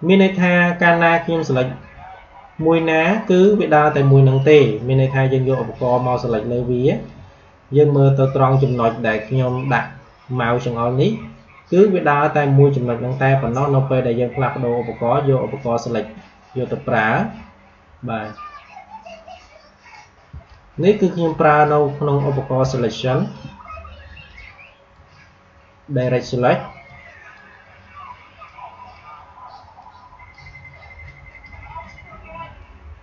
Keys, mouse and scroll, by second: 2.5 space, 2.7 click, 2.9 space, 4.3-10.3 drag, 13.3 a, 15.5-20.2 drag, 20.2 space, 20.4 click, 20.9 space, 22.7 click, 22.9 space, 24.2-33.0 drag.